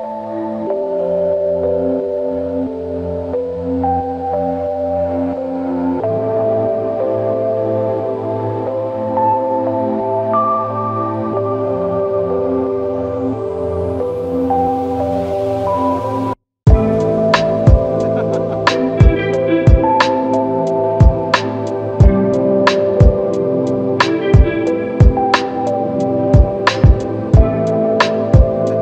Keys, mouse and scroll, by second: 0.0-0.3 typing, 1.9 ctrl+click, 6.4 ctrl+click, 10.0 ctrl+click, 11.7 alt+click, 19.9 ctrl+click, 20.1 ctrl+double click, 20.4 ctrl+click, 22.5 ctrl+click, 22.6 ctrl+click, 24.4 ctrl+click, 24.6 ctrl+double click, 26.1 q, 27.0 ctrl+click, 27.2 ctrl+double click, 27.4 ctrl+click.